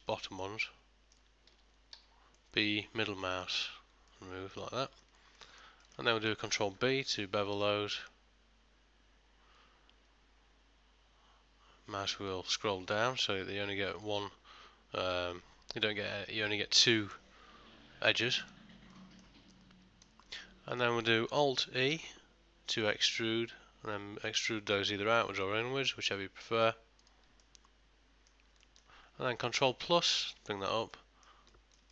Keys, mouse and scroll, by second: 0.2 middle click, 0.7 shift+middle click, 2.0 b, 4.2 middle click, 4.9 shift+middle click, 5.5 middle click, 5.9 ctrl+middle click, 6.2 shift+middle click, 7.2 ctrl+b, 19.0 middle click, 19.6 ctrl+middle click, 20.1 ctrl+middle click, 20.4 middle click, 22.0 alt+e, 27.5 middle click, 28.7 ctrl+middle click, 30.1 ctrl+KP_Add, 31.0 middle click, 31.6 ctrl+middle click.